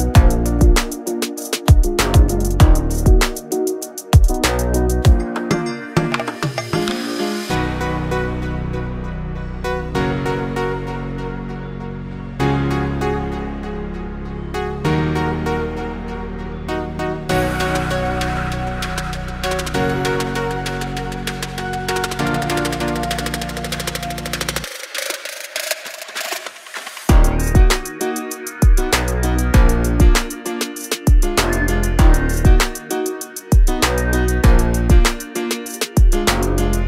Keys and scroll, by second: 0.3 2, 0.6 Return, 6.4 l, 9.7 space, 10.1 p, 13.3 space, 14.0 m, 14.9 space, 15.2 p, 19.7 space, 22.0 r, 25.5 space, 25.8 p, 29.1 space, 30.2 m, 31.7 space, 32.0 p, 35.6 space, 36.3 f.